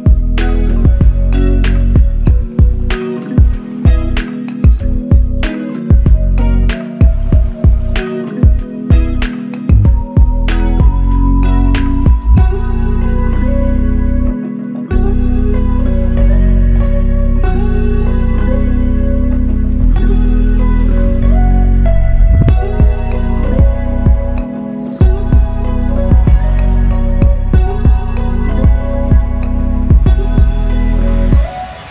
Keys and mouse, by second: 5.9 alt+click, 7.0 ctrl+click, 8.3 alt+click, 9.8-11.1 typing, 11.3 alt+click, 12.6 ctrl+click, 14.1 alt+click, 15.2 ctrl+click, 16.7 alt+click, 19.4 shift+click, 23.1 shift+click, 24.8 shift+click.